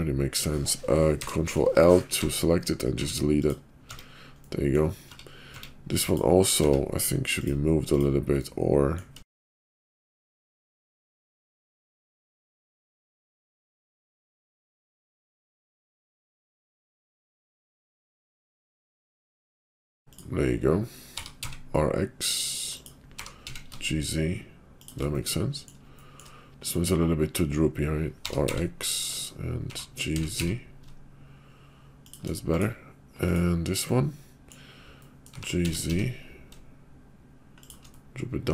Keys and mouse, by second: 1.2 ctrl+l, 2.2 x, 2.9 x, 3.9 Tab, 4.4 middle click, 5.1 Tab, 5.5 Tab, 6.6 Tab, 7.8 click, 8.4 middle click, 9.9-11.5 typing, 12.5 click, 12.7 click, 12.8 g, 13.3 click, 13.4 g, 15.2 click, 15.2 g, 15.2 g, 15.7 middle click, 16.1 shift+middle click, 16.4 KP_5, 16.6 middle click, 17.0 g, 18.3 click, 18.4 g, 19.1 g, 19.5 click, 20.0 click, 21.1 r, 23.1 g, 25.1 middle click, 26.2 shift+middle click, 26.5 click, 28.2 r, 29.5 g, 32.4 click, 33.2 click, 33.8 middle click, 35.0 middle click, 35.3 g, 37.9 middle click.